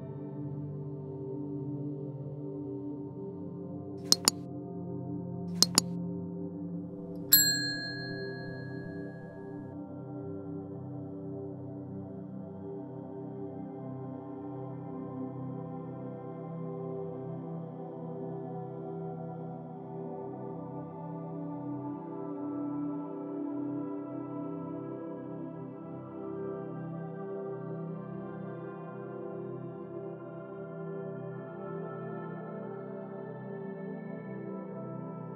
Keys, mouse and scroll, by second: 0.7 click, 0.9 scroll up 3, 1.2-2.6 middle drag, 2.6 click, 2.9-3.5 middle drag, 3.5-3.9 scroll down 4, 3.9-5.4 middle drag, 6.0 click, 7.3 click, 8.5 click, 11.6-13.6 drag, 15.5-17.2 drag, 17.9-18.7 shift+middle drag, 18.7 click, 19.7 click, 19.8 click, 23.4 scroll down 2, 23.7 middle click, 24.3 click, 25.9-27.0 middle drag, 27.0 click, 27.3 scroll up 5, 27.9 click, 29.2 middle click, 29.8-31.3 drag, 34.7 click, 35.0-35.3 drag.